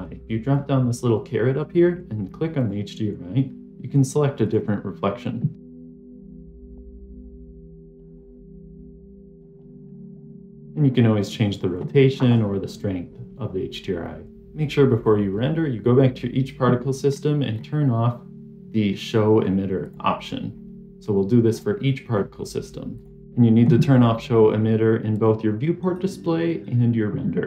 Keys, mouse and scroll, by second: 0.3-4.7 drag, 5.7 click, 6.9-8.5 drag, 8.6 middle click, 9.5-14.3 drag, 16.9-17.5 scroll down 3, 17.4 scroll up 1, 17.5-19.7 scroll down 1, 19.7 click, 19.7 scroll down 1, 21.4 scroll up 1, 21.4-22.0 scroll down 1, 22.0-22.8 scroll up 2, 22.8 click, 23.2-25.0 scroll down 2, 25.0 click, 25.3 v.